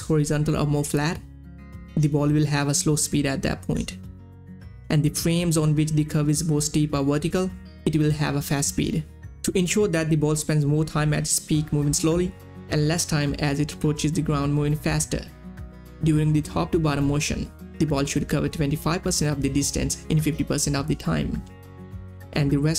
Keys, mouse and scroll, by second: 4.9-8.4 drag.